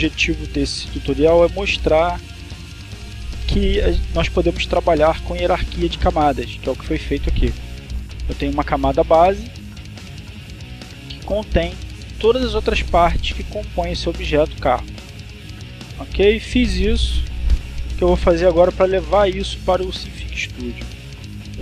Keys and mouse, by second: 1.9 click, 2.6 click, 8.3 click, 9.7 click, 10.2 click, 11.0 click, 20.9 click.